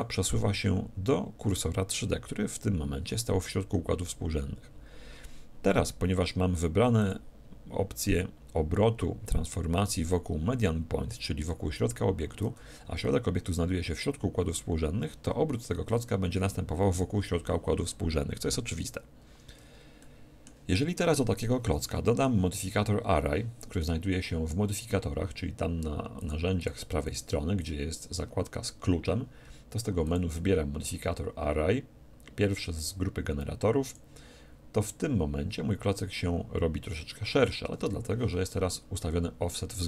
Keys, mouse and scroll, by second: 7.0-8.9 drag, 12.7 Escape, 15.9 r, 20.0-23.6 middle drag, 26.2-29.5 drag, 30.0-31.9 drag.